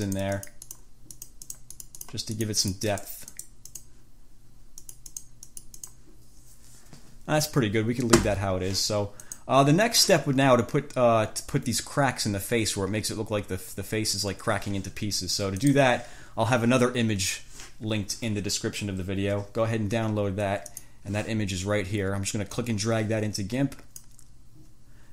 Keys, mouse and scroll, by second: 0.3 click, 1.4 click, 2.6 click, 5.0 click, 9.5 click, 15.8 click, 20.9 click, 22.7-24.5 drag.